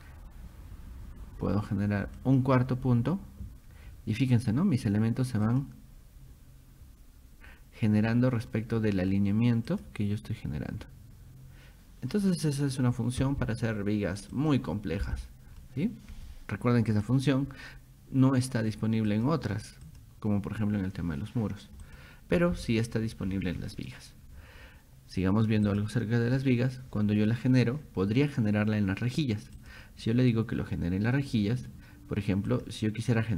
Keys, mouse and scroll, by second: 2.2 click, 5.5 click, 8.1 middle click, 9.7 click, 14.4 click, 15.6 middle click, 15.6 scroll up 2, 16.9 click, 19.1 click, 19.9 click, 21.9 click, 23.3 middle click, 23.3 scroll down 2, 23.6 middle click, 25.7 click, 29.6 click, 32.5 click.